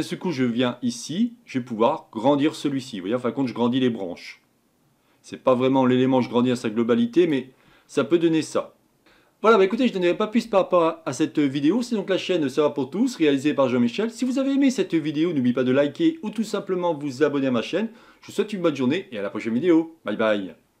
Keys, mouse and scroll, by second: 1.2-3.7 drag, 7.9-8.5 scroll down 5, 8.5-9.2 scroll up 3, 9.2-20.8 scroll up 2.